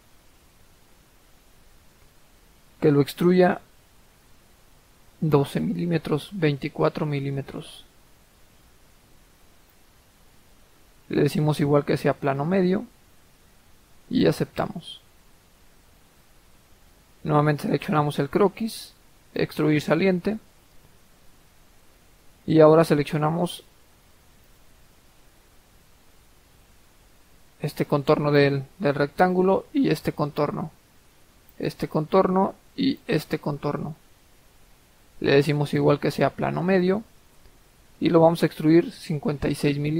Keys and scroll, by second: 8.8-9.1 typing.